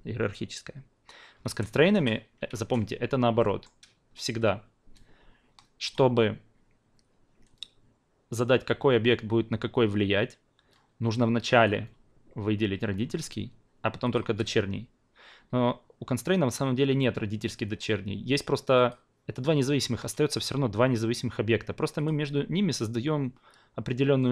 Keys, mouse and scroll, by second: 1.5 ctrl+z, 1.8 ctrl+z, 2.5 ctrl+z, 3.4 alt+middle drag, 5.8-11.6 drag, 14.0 shift+click, 18.7 drag, 22.0-24.3 drag.